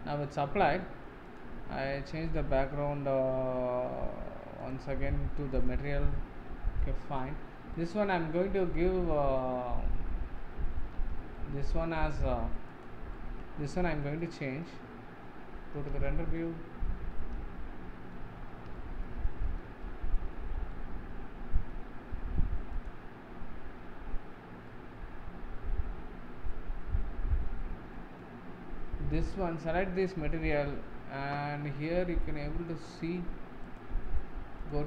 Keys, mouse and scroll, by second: 0.4 scroll down 3, 0.8-1.2 middle drag, 1.2 click, 4.6 click, 6.5 scroll up 3, 6.8 middle click, 7.6 scroll up 1, 7.7 middle click, 8.2 z, 10.5 z, 11.3-12.7 shift+middle drag, 12.7 click, 13.1-14.5 middle drag, 14.5 z, 16.0-16.6 shift+middle drag, 16.6-17.1 scroll down 7, 17.1-18.3 middle drag, 18.3-18.6 scroll up 3, 18.7-20.3 shift+middle drag, 20.3-20.7 scroll up 2, 20.7-22.1 middle drag, 22.1-22.7 scroll up 1, 22.7 click, 23.7-24.6 scroll up 1, 24.6-27.6 middle drag, 27.6 scroll down 2, 27.9-29.1 middle drag, 29.1 click, 31.6-32.2 scroll up 5, 32.2 middle click, 32.7 scroll up 1, 33.6 click, 34.6-34.8 drag.